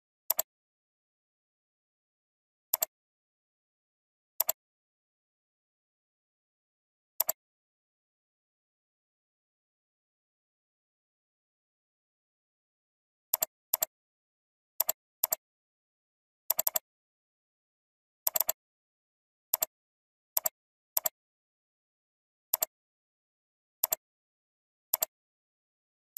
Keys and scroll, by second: 21.9 ctrl+t.